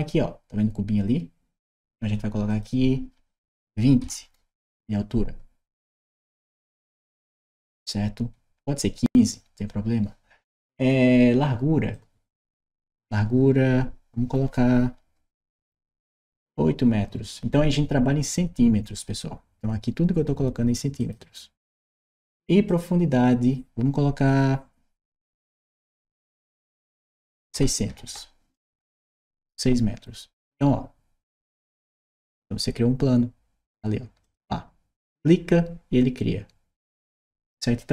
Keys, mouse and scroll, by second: 2.3 click, 5.7 click, 11.7 click, 20.7 click, 22.4 click, 28.6 Return, 34.0 click.